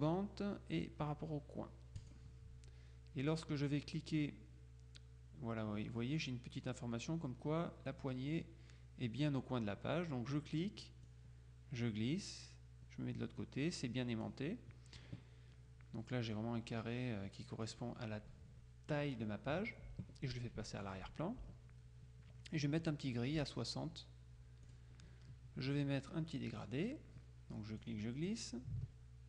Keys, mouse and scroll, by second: 2.1 click, 11.2-14.8 drag, 17.7 click, 20.9 click, 24.8 click, 26.7 click, 27.9-29.2 drag.